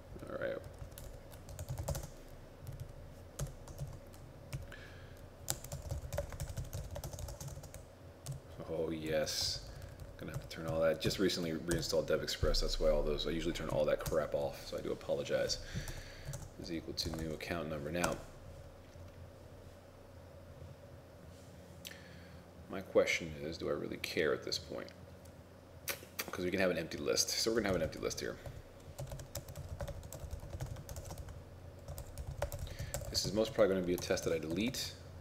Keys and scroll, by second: 1.1 ctrl+Left, 5.6 shift+a, 6.5 shift+n, 9.6 ctrl+shift+Left, 9.9 ctrl+shift+Left, 10.1 ctrl+shift+Left, 27.7 shift+9, 29.2-31.2 typing, 33.3 shift+0, 34.3 ctrl+shift+s, 34.6 ctrl+r, 34.8 ctrl+r.